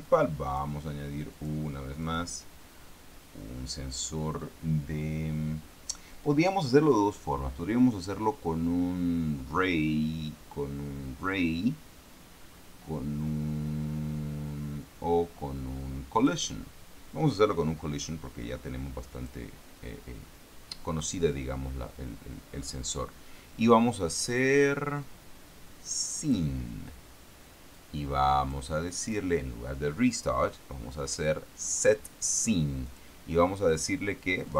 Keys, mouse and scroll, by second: 0.4 click, 1.7 click, 2.3 click, 16.5 click, 19.5 click, 26.5 click, 28.1 click, 29.3 click, 32.2 click, 33.2 click.